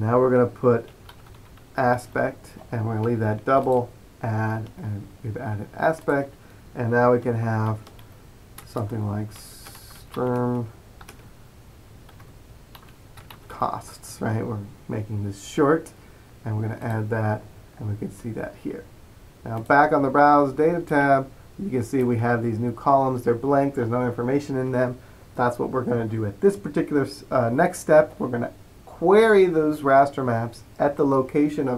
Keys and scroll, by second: 0.8-2.5 typing, 7.8-14.1 typing.